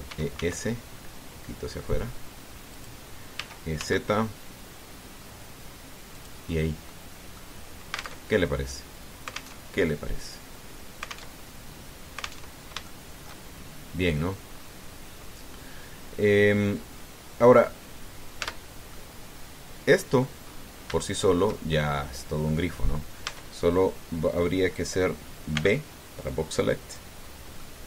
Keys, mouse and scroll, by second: 0.9 e, 1.1 s, 3.5 click, 4.2 e, 4.6 z, 6.9 click, 7.3-7.6 scroll down 1, 7.7 click, 9.0 alt+Tab, 10.4 alt+Tab, 11.2-11.5 scroll down 2, 12.1 alt+Tab, 13.3 alt+Tab, 13.6 alt+shift+click, 14.3-14.7 shift+scroll up 3, 14.9 scroll down 2, 15.3 scroll up 2, 15.6 scroll down 2, 18.8-19.1 scroll down 2, 19.2 Tab, 19.7-21.2 drag, 21.7 shift+click, 22.5 shift+click, 24.1 Tab, 24.9-25.2 scroll down 2, 26.4 b, 27.1 click.